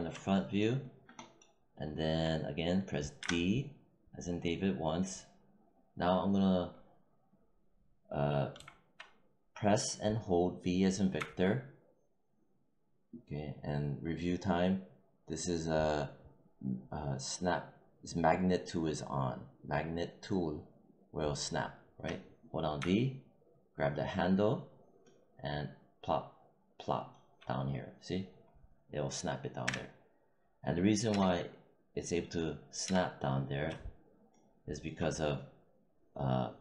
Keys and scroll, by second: 3.1 d, 8.5 v, 11.1 v, 29.5 w, 31.0 space, 32.7 space.